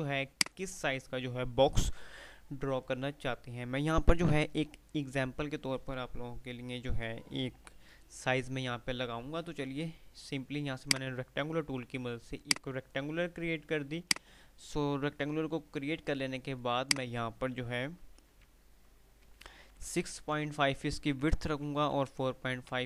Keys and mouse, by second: 1.5 typing, 10.9-13.2 drag, 15.9 typing, 16.6 click.